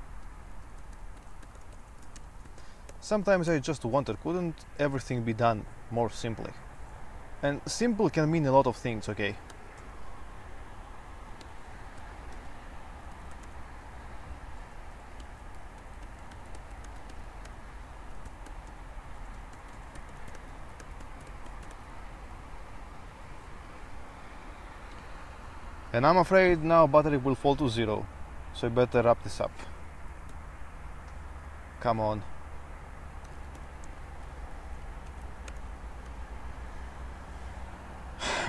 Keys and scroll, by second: 0.0-5.3 typing, 6.4-7.1 typing, 9.7-10.0 typing, 11.4-22.1 typing, 30.6 super+3, 31.5 super+t, 32.9-35.1 typing, 35.4 ctrl+e, 35.6 Return, 36.3 super+1.